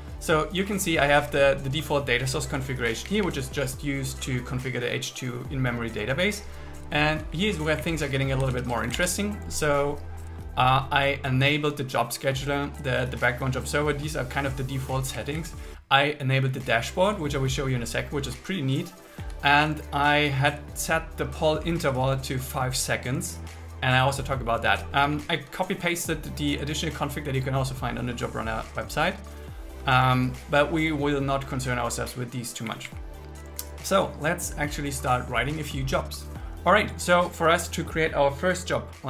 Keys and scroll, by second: 2.9 Down, 7.0 Down, 7.8 Up, 8.6 super+Up, 8.8 super+1, 15.2 Down, 19.2 Down, 25.0 Down, 30.2 Down, 32.7 Up.